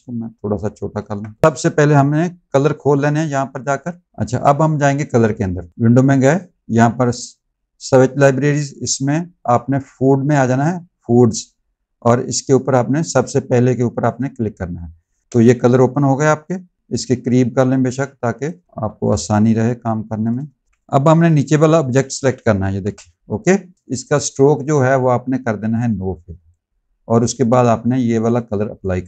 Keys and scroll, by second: 15.2 space, 18.5 space, 18.8 z, 20.3 space, 20.7 v, 22.7 BackSpace.